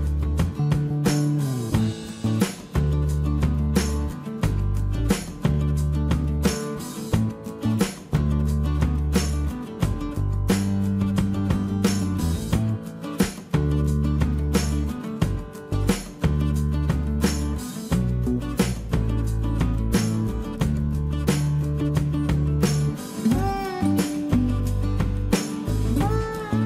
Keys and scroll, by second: 3.8 Escape, 18.8 Escape, 21.0 p, 24.1-25.4 typing, 26.5 space.